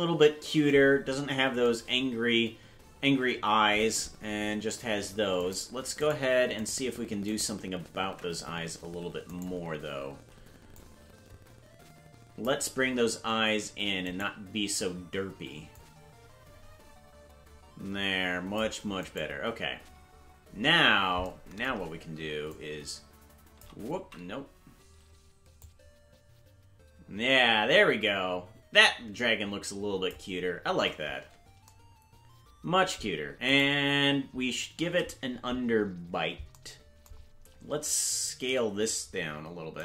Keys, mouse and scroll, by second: 1.0-1.4 scroll up 3, 5.4 right click, 8.0 ctrl+Tab, 8.0 right click, 9.5-10.7 right drag, 10.7-12.4 drag, 14.2 right click, 15.7-18.6 drag, 19.1-21.2 right drag, 22.4-23.6 shift+drag, 24.5 ctrl+z, 25.5-30.1 drag, 31.6 ctrl+z, 33.7 right click, 38.4 a.